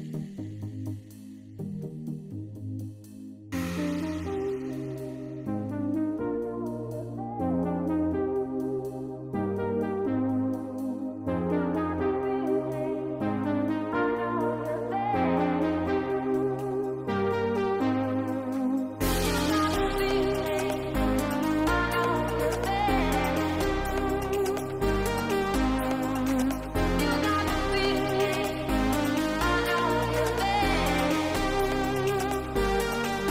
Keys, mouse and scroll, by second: 0.4 shift+middle drag, 1.0 shift+middle drag, 1.2 click, 1.6 Tab, 2.7 middle click, 4.9 middle click, 7.6 middle click, 8.7 click, 9.1 shift+middle click, 11.5 click, 14.1-15.2 drag, 17.4 middle click, 18.4 click, 22.1 click, 23.0-24.1 drag, 27.7 Tab, 29.2 middle click, 32.4 click.